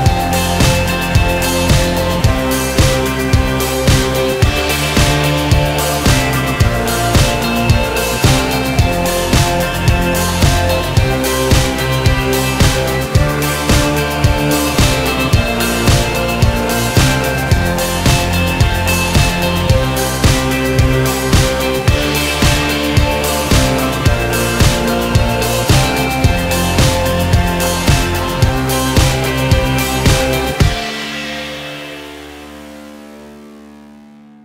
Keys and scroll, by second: 2.9 alt+z, 6.1 ctrl+r, 7.4 ctrl+a, 10.7 ctrl+a, 13.3 ctrl+a, 24.5 alt+z, 28.2 Escape.